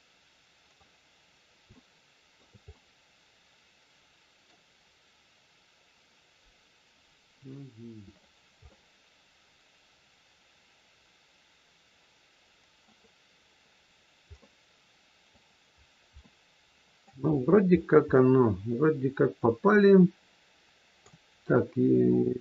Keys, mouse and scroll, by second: 1.1-1.6 scroll up 1, 1.6 shift+middle click, 2.7 middle click, 7.4 middle click, 8.7 middle click, 13.9 scroll down 1, 14.3 middle click, 15.6-16.2 scroll down 2, 16.2 middle click, 16.2 scroll down 1, 17.3-18.3 scroll up 7, 18.1 middle click, 22.2-22.4 scroll down 2.